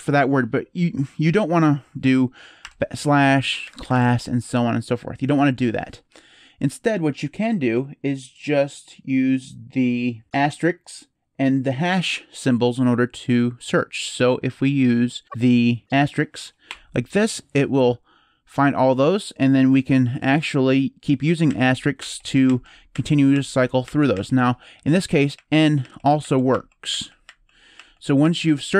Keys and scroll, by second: 2.4-4.3 typing, 5.0 Escape, 16.4 *, 21.2-23.9 typing, 25.1-28.4 typing.